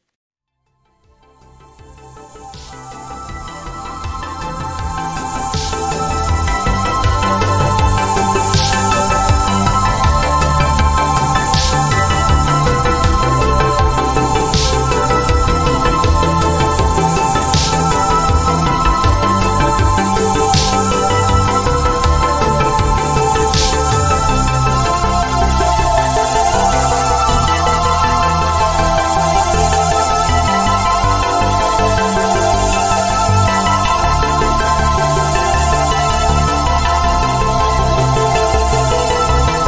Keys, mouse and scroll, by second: 14.1 click, 25.5 ctrl+z, 26.3 click, 31.2 ctrl+z, 31.9 click, 32.7 z, 33.5 click.